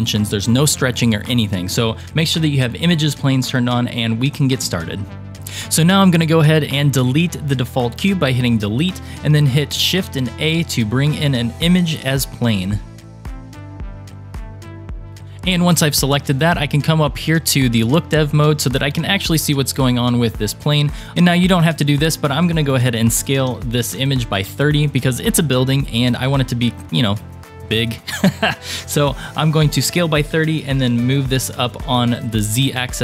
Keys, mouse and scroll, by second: 5.3 ctrl+z, 5.3 click, 6.3 click, 8.0 Delete, 9.6 shift+a, 18.1 click, 19.2-20.9 scroll up 4, 20.9 click, 20.9-22.3 scroll up 3, 21.1 ctrl+z, 22.3 click, 22.8 s, 24.7-26.3 scroll down 8, 30.8 g.